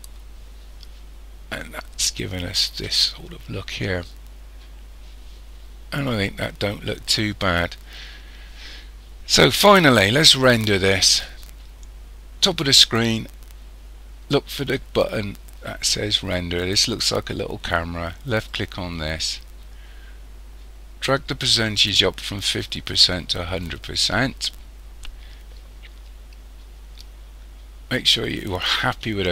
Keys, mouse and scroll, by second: 18.3 click, 22.6 click, 26.1-29.3 scroll up 3.